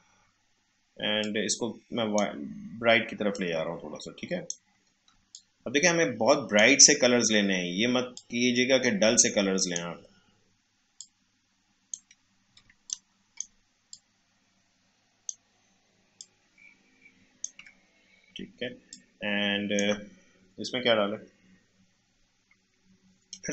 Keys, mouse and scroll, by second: 5.1 space, 5.3 click, 5.6 space, 8.1-11.0 drag, 11.0-12.6 shift+drag, 12.6 space, 12.8 click, 13.1 space, 13.9-18.6 shift+drag, 18.6 space, 18.9 click, 19.2 space.